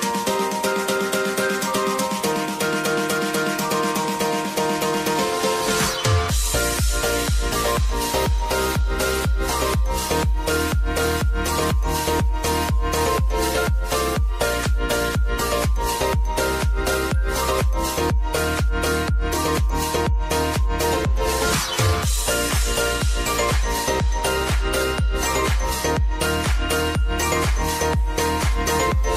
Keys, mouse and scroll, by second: 0.7 click, 1.0 space, 2.1 space, 2.7 click, 3.1 space, 5.2 click, 5.6 space, 8.9-11.7 drag, 13.1 right click, 14.0 click, 18.7 space, 20.2 click, 20.6 space, 23.5 click, 24.5 space, 27.3 click.